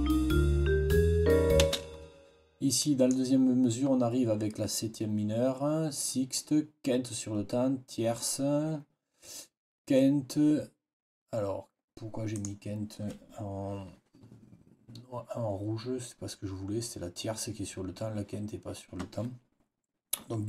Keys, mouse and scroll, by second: 1.5 space, 2.7 click, 12.2 click.